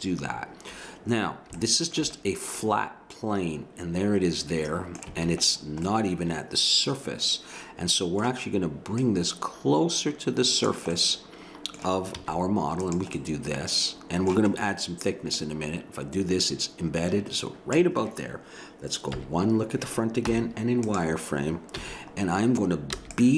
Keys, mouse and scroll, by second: 2.6 middle click, 2.8-4.3 middle drag, 5.0 a, 5.5-7.3 middle drag, 8.9-10.8 drag, 10.9-12.8 middle drag, 12.2 z, 13.2 middle click, 15.3-17.2 drag, 19.1 KP_1, 20.3 z, 21.7 a, 23.0 b.